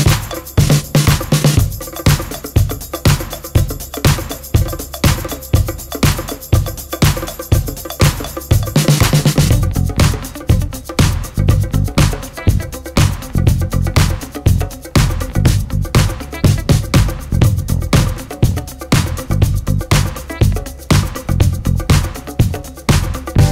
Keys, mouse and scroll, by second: 0.3 click, 2.9-5.5 drag, 6.8 ctrl+d, 8.1 ctrl+d, 8.9 click, 10.7 shift+click, 11.1 shift+click, 12.7 ctrl+g, 14.4 click, 19.5-23.5 ctrl+shift+drag.